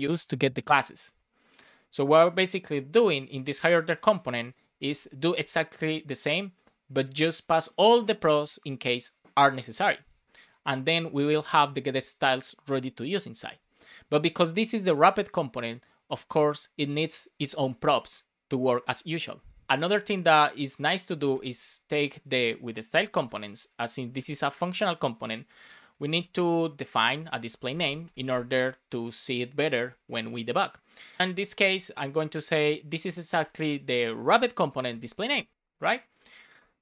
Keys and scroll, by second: 19.9 Return, 23.1 super+c, 24.0 super+v, 27.4 shift+n, 28.0 space, 29.2 space, 31.6 shift+w, 32.9 Down, 33.3 Return, 35.3 Return, 35.5 super+s, 36.1 Down, 36.5 BackSpace.